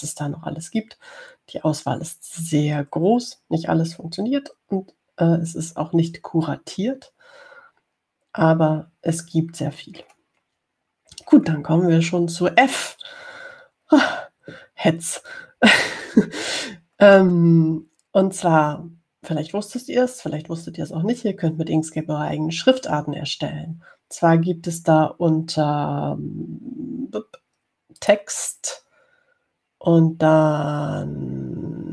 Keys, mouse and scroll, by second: 11.0-13.4 scroll down 4, 29.2 click.